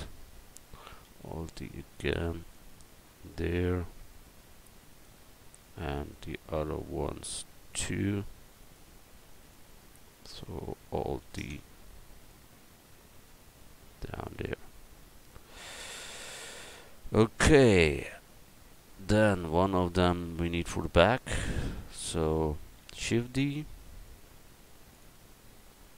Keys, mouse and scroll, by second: 1.0 alt+d, 7.7-11.2 drag, 11.3 alt+d, 12.2 click, 13.3 click, 16.3 a, 19.2-20.5 right drag, 23.1 shift+d.